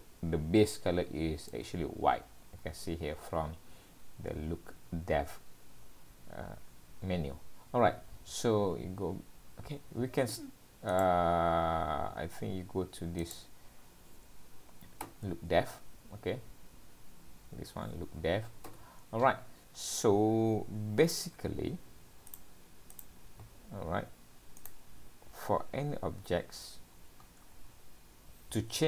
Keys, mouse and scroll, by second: 0.0 middle click, 7.9 scroll down 3, 8.1-8.5 scroll up 3, 10.0 scroll up 1, 11.0 click, 13.2 click, 22.3 click, 22.9 click, 24.7 click, 26.9 scroll down 2, 27.2-27.7 scroll up 2.